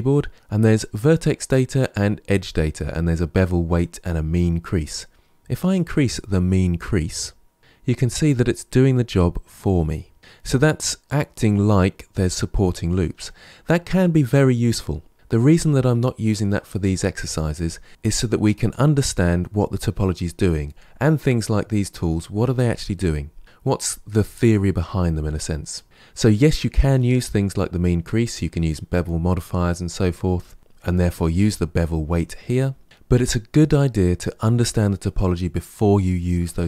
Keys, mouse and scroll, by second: 5.6-7.6 drag.